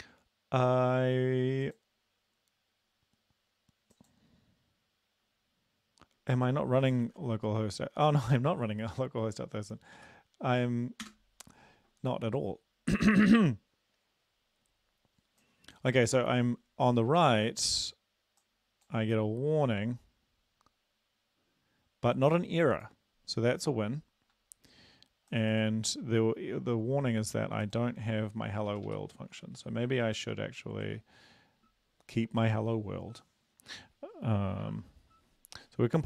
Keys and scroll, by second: 7.1 ctrl+`, 11.1 Return, 28.7 Up, 28.9 ↑, 29.0 Up, 29.6 ctrl+/, 30.1 ctrl+s.